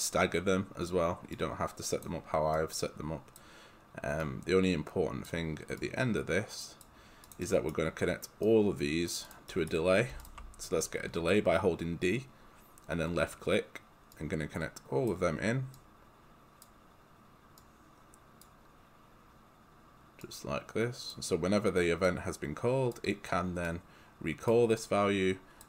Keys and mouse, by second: 1.5 click, 5.9 click, 7.4 click, 7.5 right click, 8.5 click, 9.3 click, 9.5 right click, 10.1 d, 10.2 click, 12.0 d, 14.2 click.